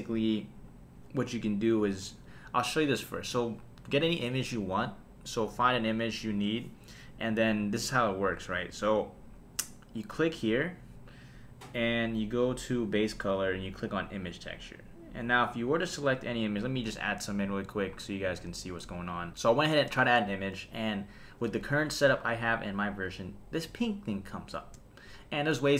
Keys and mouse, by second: 1.7 click, 6.7 click, 7.9 click, 10.1 click, 13.1-14.4 drag, 15.7-18.8 drag.